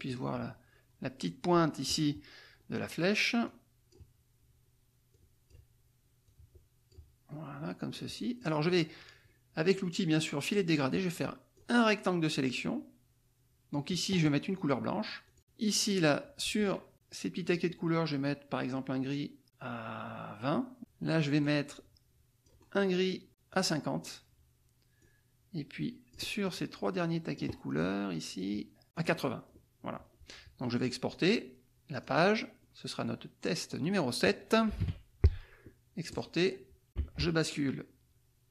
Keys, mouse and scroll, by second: 3.4 click, 5.1 click, 6.2 click, 7.9 click, 11.5-13.9 drag, 15.2-16.6 drag, 20.8 click, 21.4-22.8 scroll down 2, 23.6 click, 25.0-27.5 drag, 27.8-28.8 drag, 28.9 click, 31.9 click, 32.9 click, 34.8 KP_7, 36.1 click, 37.0 alt+Tab.